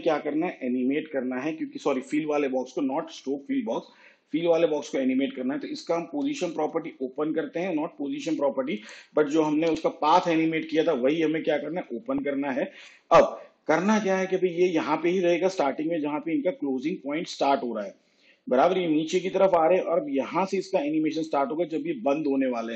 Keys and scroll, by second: 6.2 p, 9.7 u.